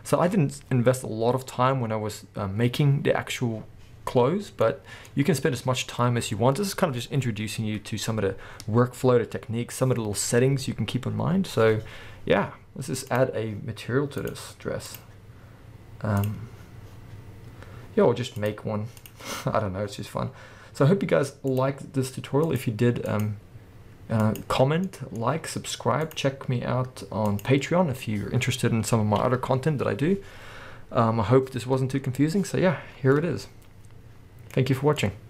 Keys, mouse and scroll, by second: 4.5 scroll down 2, 12.6-13.2 scroll down 2, 13.2 click, 14.3 click, 14.9-21.7 drag, 24.9-26.0 middle drag, 26.0 click, 27.8-28.6 scroll up 1, 33.2-34.3 middle drag, 35.1 middle click.